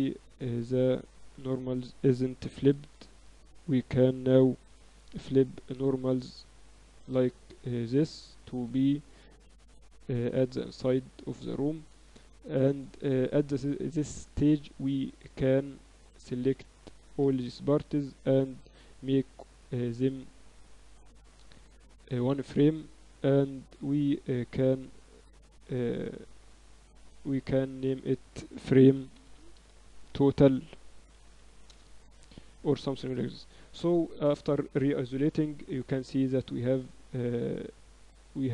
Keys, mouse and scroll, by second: 0.4 Tab, 1.0 a, 1.2 a, 2.4 a, 2.6 ctrl+n, 3.1 Tab, 3.8 Tab, 4.6 t, 5.8-7.5 drag, 6.9 t, 7.5 Tab, 7.9 right click, 8.3 Tab, 8.5 a, 8.7 a, 9.3 right click, 9.3 t, 10.3 click, 10.5 t, 11.0 Tab, 11.4 z, 11.8 z, 12.0 click, 12.6 z, 13.5 click, 14.0 z, 17.2 ctrl+j, 17.5 Tab, 18.1 Tab, 18.4 Tab, 19.0 Tab, 19.4-22.1 drag, 23.2-24.6 drag, 24.6-25.6 middle drag, 25.6 z, 25.9 z, 27.8-29.5 drag, 33.0 KP_1, 34.0 KP_Divide, 34.4 KP_1, 36.2 z, 37.0 z.